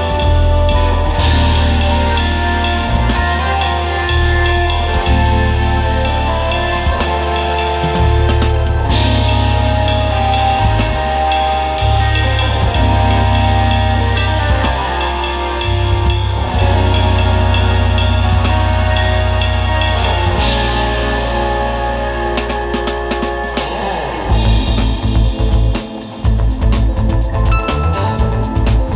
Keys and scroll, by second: 0.6 super+z, 1.3 space, 3.3 super+z, 5.0 super+z, 11.2 space, 11.6 space, 13.5 space, 14.7 super+j, 17.7 space, 18.3 super+space, 20.9 space, 26.2 space.